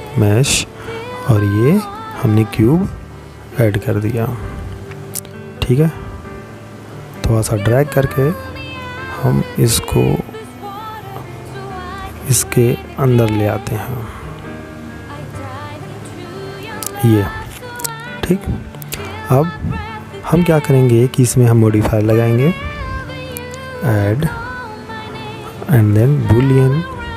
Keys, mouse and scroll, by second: 3.7 click, 9.8 click, 21.1 click, 25.8 click.